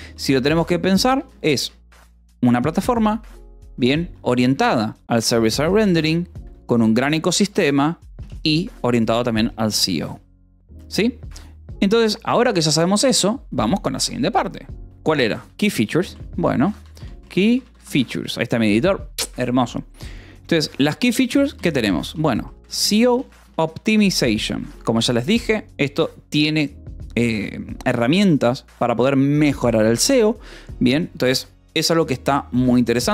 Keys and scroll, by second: 0.5 o, 0.9 BackSpace, 1.5 Escape, 3.7-8.6 typing, 5.6 Escape, 8.7 Escape, 10.6 o, 11.7 Return, 15.8-18.6 typing, 21.3 :, 21.5 space, 22.7-25.7 typing.